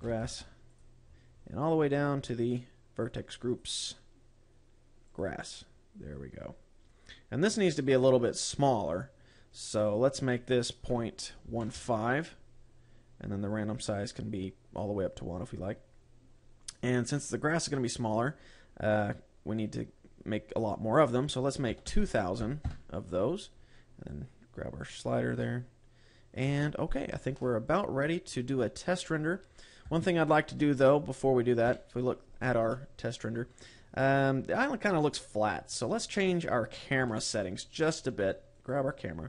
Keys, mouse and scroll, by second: 0.0 click, 1.5-2.2 scroll down 7, 2.8 click, 4.0 click, 4.3 click, 6.4-7.3 scroll up 6, 7.3-9.0 scroll up 12, 9.0-10.0 scroll up 2, 10.3 click, 14.0 click, 17.0-17.4 scroll up 2, 17.6 middle click, 18.8-19.8 scroll up 9, 20.2-21.0 scroll up 2, 21.0 click, 24.6 click, 25.8 scroll up 1, 25.9 middle click, 27.7 ctrl+s, 28.8 middle click, 30.4 KP_0, 37.4 Escape, 38.4-39.0 scroll down 2, 39.0 right click.